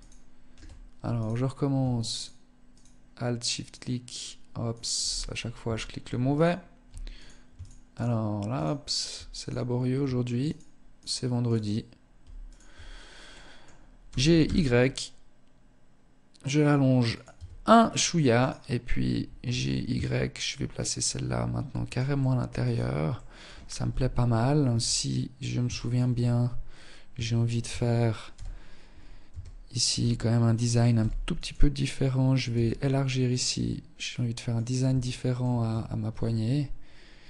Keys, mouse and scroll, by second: 0.3 alt+right click, 1.3 alt+right click, 1.8 alt+right click, 2.7 alt+shift+right click, 3.8 alt+shift+right click, 4.2-4.8 scroll up 1, 4.8 scroll up 2, 5.0 shift+middle click, 5.4 right click, 6.3 alt+right click, 6.7 alt+shift+right click, 7.1 alt+shift+right click, 7.6 alt+shift+right click, 8.5 alt+right click, 9.6 alt+right click, 10.1 alt+shift+right click, 10.6 alt+shift+right click, 11.6 shift+right click, 12.0-12.4 scroll up 1, 12.4 middle click, 13.2 g, 16.5 Tab, 16.7-17.1 scroll down 6, 17.6 right click, 18.6 g, 21.3 middle click, 21.8-22.1 scroll down 4, 22.3 middle click, 23.0 KP_1, 23.8 Tab, 24.9 shift+middle click, 25.3-26.2 scroll up 2, 26.2 scroll up 1, 26.4 shift+middle click, 26.8 a, 27.4 z, 28.4 a, 29.0 a, 30.1 b, 31.6 s, 34.2 shift+middle click, 34.8 Tab, 35.2 Tab, 35.7-36.4 scroll up 1, 36.4 a.